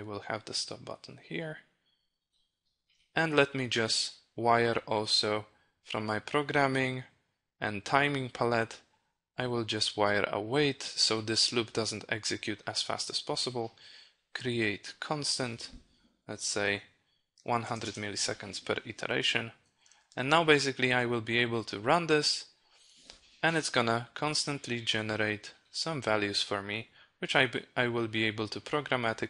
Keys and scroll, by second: 19.8 ctrl+e.